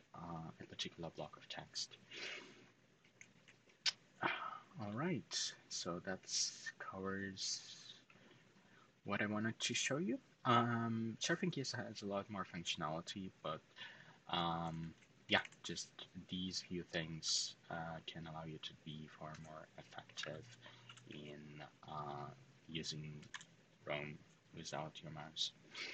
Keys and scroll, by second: 3.1-3.4 typing, 4.4 typing, 14.2-15.1 typing, 17.0 typing, 19.0-20.6 typing, 22.6-23.5 typing.